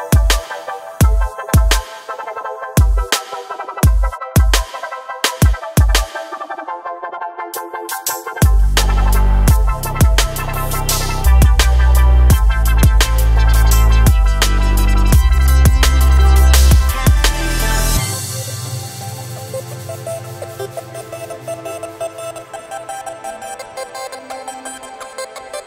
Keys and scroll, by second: 4.9 KP_1, 6.2 g, 11.2 KP_1.